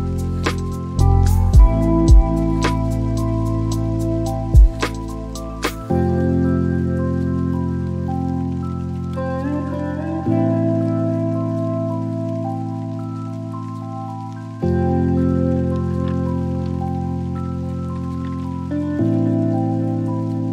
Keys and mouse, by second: 1.9 d, 4.3 click, 5.6 shift+d, 6.9 click, 8.7 shift+click, 9.7 shift+a, 16.2 click, 16.9 click, 18.8 click.